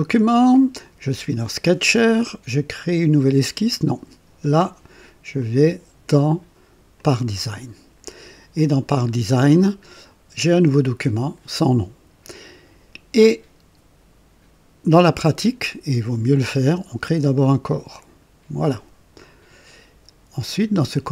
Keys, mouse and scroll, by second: 5.4 click, 6.9 click, 8.5 click, 18.0 click.